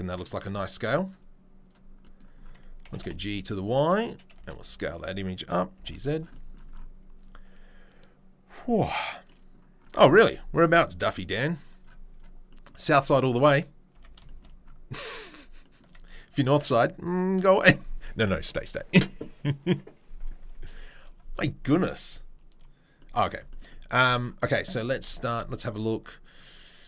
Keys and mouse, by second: 1.0-1.7 drag, 1.7-10.2 middle drag, 2.8 g, 4.3 s, 5.7 g, 11.7 drag, 13.9 Tab, 14.1 shift+middle click, 15.3-26.8 shift+middle drag, 25.5 Tab.